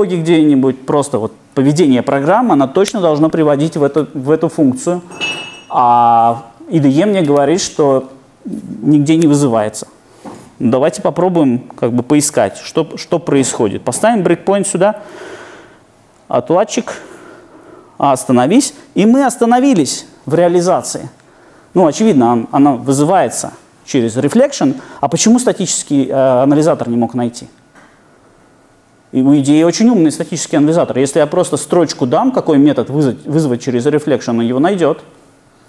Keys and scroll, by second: 14.5 super+F8, 17.8 ctrl+d.